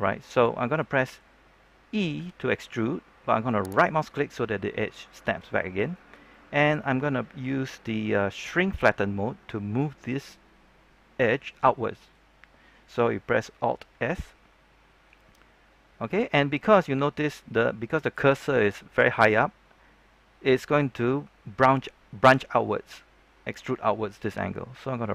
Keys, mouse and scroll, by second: 2.1 e, 3.6 right click, 6.2 middle click, 14.0 alt+s.